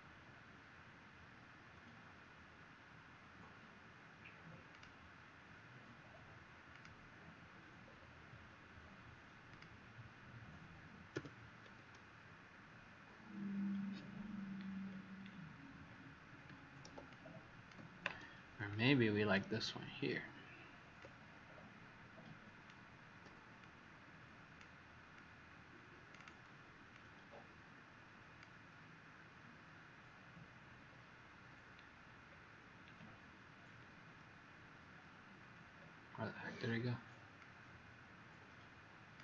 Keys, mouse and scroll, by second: 11.1 w, 14.8 alt+scroll down 1, 15.8 alt+scroll up 1, 17.0 click, 18.6 click, 23.6 click, 25.1 click, 32.2 alt+scroll down 1, 35.7-36.2 scroll up 1, 36.2-37.3 scroll up 1, 37.3 click.